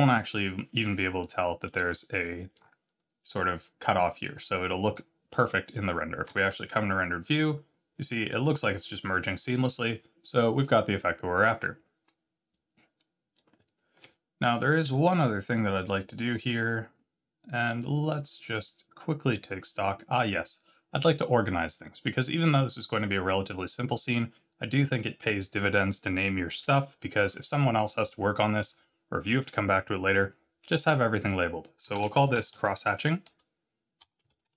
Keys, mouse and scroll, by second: 2.5 scroll up 5, 4.3-5.7 scroll down 1, 5.7-6.2 scroll down 1, 6.2 z, 7.6-8.6 scroll down 1, 9.3-12.4 scroll down 3, 13.5 z, 15.0 shift+middle click, 16.9-18.1 scroll up 3, 20.0 click, 21.8 scroll down 2, 26.5 F2, 32.5 s.